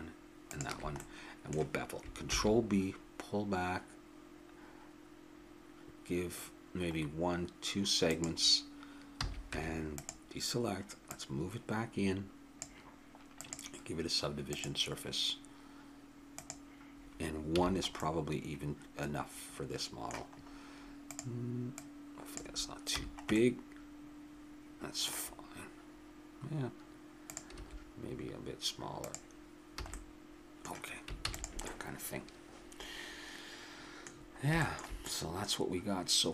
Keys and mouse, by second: 1.0 middle click, 2.3 ctrl+b, 9.2 a, 9.5 Tab, 11.1-13.1 drag, 13.4-17.6 drag, 17.6 a, 18.0-19.7 middle drag, 21.1-23.5 drag, 22.9 a, 27.3-28.9 drag, 27.6 s, 29.7 a, 29.9-31.2 middle drag, 31.2 ctrl+s, 34.1-36.3 middle drag.